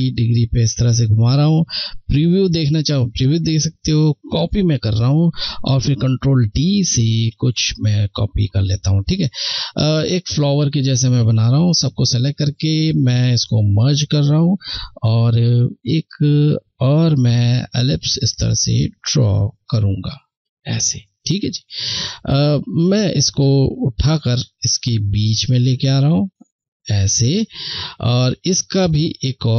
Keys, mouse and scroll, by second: 1.0 click, 3.4 click, 5.5 ctrl+d, 7.2 ctrl+d, 8.6 click, 8.6 click, 17.1 shift+click.